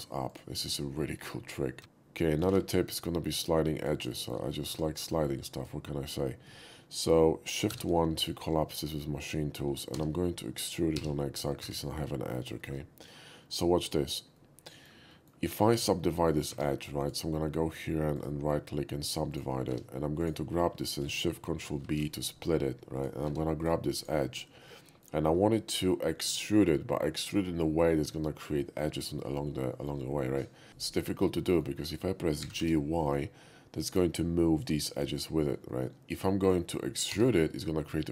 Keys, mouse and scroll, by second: 0.3 click, 0.9 middle click, 1.8 x, 2.6 shift+a, 2.6 shift+q, 3.8 click, 4.2 shift+middle click, 4.7 Tab, 5.5 click, 7.7 shift+1, 8.3 shift+middle click, 9.9 e, 10.9 x, 11.4 click, 11.6 Tab, 12.6 shift+middle click, 14.3-14.8 shift+middle drag, 15.1 shift+middle click, 16.5 Tab, 17.0 click, 18.2 right click, 19.3 click, 19.7 Tab, 20.2 click, 21.8 ctrl+shift+b, 23.0 click, 23.3 Tab, 23.6 click, 24.0 click, 24.7 middle click, 29.7 shift+middle click, 30.1 shift+middle click, 30.7 g, 31.5 shift+middle click, 31.8 shift+middle click, 32.4 g, 32.6 y, 33.8 right click, 34.6 click, 35.1 click, 35.7 middle click, 36.4 click, 37.2 e.